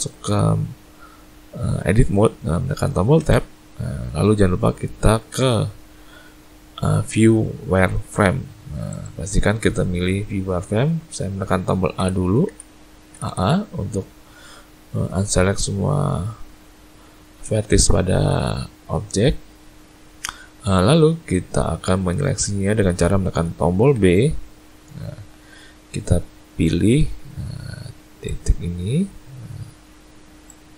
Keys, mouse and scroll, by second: 3.2 Tab, 5.3 z, 12.0 a, 12.5 a, 13.1 a, 13.3 a, 24.0 b.